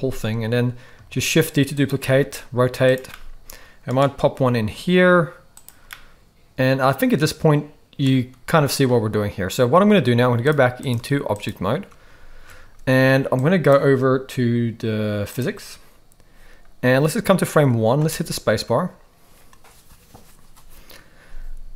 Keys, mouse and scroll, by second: 1.1 shift+d, 2.1 r, 3.1 middle click, 4.3 g, 6.0-8.0 middle drag, 10.4 click, 10.9 click, 12.1 ctrl+s, 12.3 ctrl+s, 13.4 click, 15.4 drag, 18.0 space.